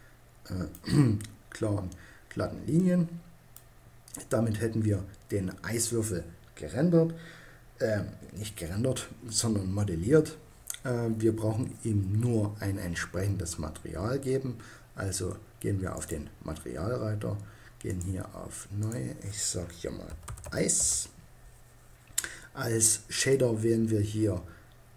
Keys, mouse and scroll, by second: 15.5-17.1 drag, 17.3 middle click, 20.2-23.0 middle drag, 24.7 middle click.